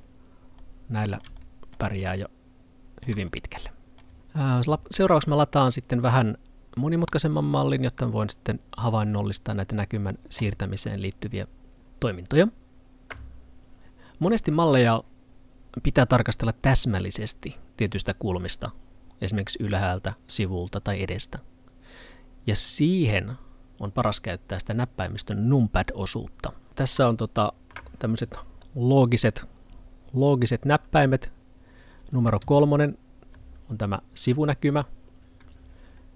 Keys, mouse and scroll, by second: 0.0-0.6 scroll down 1, 0.6 middle click, 7.1 click.